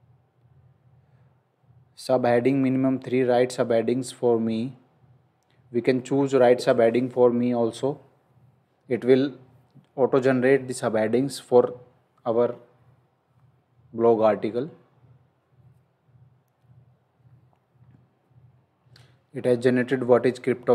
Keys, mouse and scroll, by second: 6.6 click, 17.2 scroll up 1, 17.7-18.3 scroll down 1, 19.0 scroll up 1.